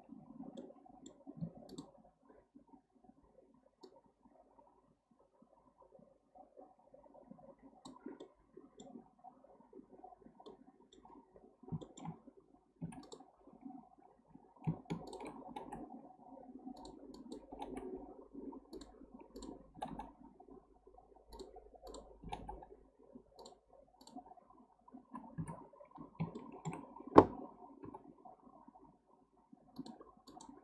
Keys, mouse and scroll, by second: 0.6 middle click, 1.4 2, 1.7 click, 3.8-7.1 drag, 8.2-11.4 middle drag, 11.4-11.8 scroll down 2, 11.8-12.9 shift+middle drag, 12.9 1, 13.0 click, 15.1 shift+drag, 15.5 g, 17.1 click, 17.5 g, 19.4 drag, 19.8 g, 21.9 click, 22.2 g, 24.0 drag, 25.4 KP_7, 26.0-26.4 scroll up 2, 26.4-27.8 shift+middle drag, 27.8 g, 30.3 click.